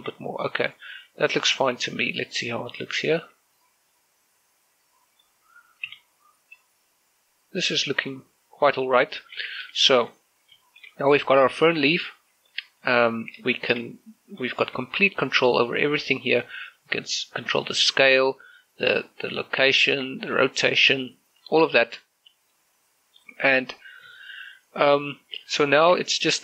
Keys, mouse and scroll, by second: 0.5-0.9 scroll down 1, 1.1 shift+middle click, 1.4-2.7 middle drag, 2.7-3.0 scroll down 1, 3.0 middle click, 3.8 ctrl+shift+click, 4.5 scroll up 1, 4.7 middle click, 4.7-9.1 middle drag, 9.1-9.7 scroll down 1, 9.7 middle click, 10.2 z, 10.7 shift+middle click, 11.1 z, 11.5 shift+middle click, 11.9 middle click, 12.9-13.5 scroll up 1, 13.5 right click, 14.3 shift+middle click, 14.7 scroll down 1, 14.9 middle click, 15.6 shift+middle click, 16.2 right click, 16.6 s, 18.8 right click, 19.2 s, 19.6 right click, 20.1 g, 20.5 right click, 21.0 shift+middle click, 21.3 r, 22.1 right click, 22.5 shift+middle click, 22.8-24.3 middle drag, 24.3 middle click, 25.3 shift+middle click.